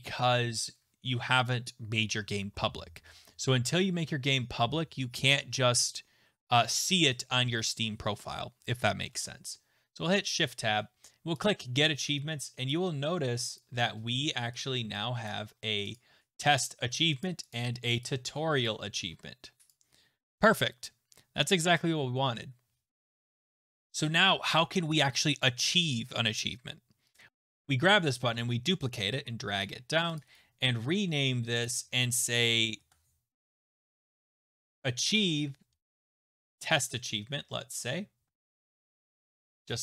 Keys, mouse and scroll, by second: 9.1 Tab, 11.4 click, 13.6 click, 15.3 click, 16.0 click, 17.2 click, 17.5 click, 18.6 click, 19.7 click, 27.1 click, 27.3 ctrl+v, 27.3 ctrl+z, 27.3 shift+click, 27.3 click, 28.2 ctrl+d, 29.6 shift+click, 30.2 click, 30.4 middle click, 30.5 right click, 31.6 click, 33.6-34.7 typing, 35.2 Down, 35.8 a, 36.1 BackSpace, 36.5-36.9 Left, 36.5 a, 37.2 Right, 37.3 Right, 37.8 Delete, 38.7-39.4 typing.